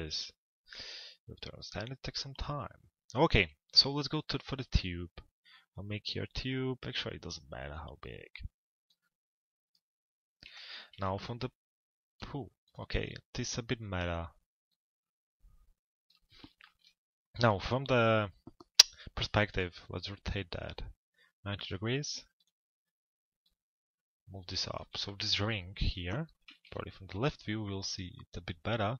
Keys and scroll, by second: 10.2 p, 26.4 l, 27.1 z.